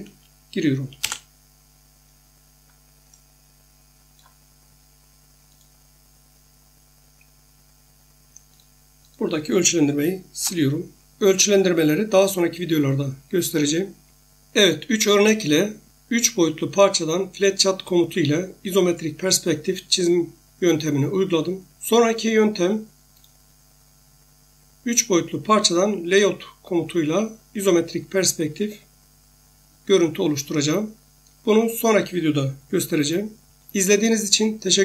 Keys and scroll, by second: 1.0 Return, 10.4 Delete.